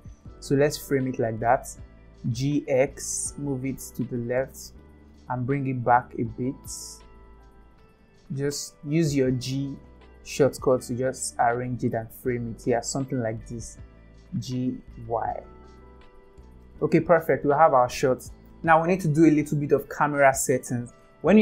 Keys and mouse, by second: 1.5 g, 5.7 g, 7.8 g, 13.2 g.